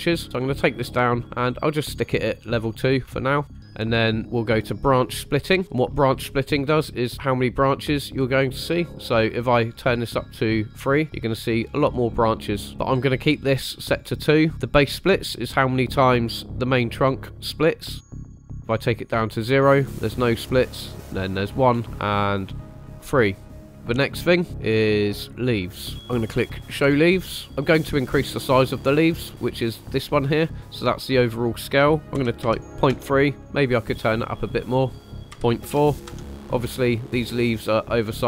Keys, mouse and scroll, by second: 0.2 click, 1.2 click, 2.4 scroll down 3, 3.0 shift+middle click, 3.4-5.2 drag, 5.6-6.2 middle drag, 10.1 click, 11.5 scroll up 2, 12.7 click, 13.8 click, 16.1-16.5 middle drag, 18.0 click, 18.4 click, 20.9 click, 21.8 middle click, 22.7 click, 23.5 middle drag, 23.7 scroll up 3, 24.1-25.4 drag, 26.7 click, 30.6-33.0 drag, 33.3-34.6 middle drag, 35.0-36.1 drag, 37.0 scroll down 2, 37.5-37.9 middle drag.